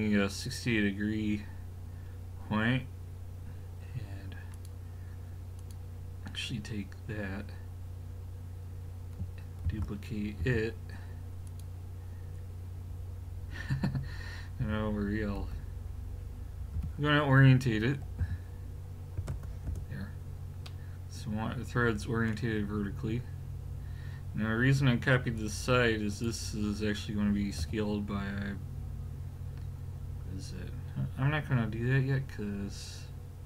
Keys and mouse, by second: 4.5-7.4 drag, 9.7 shift+d, 14.6 a, 15.4 a, 16.7 r, 20.7 middle click, 23.1-25.4 middle drag, 25.4 click, 27.6 s.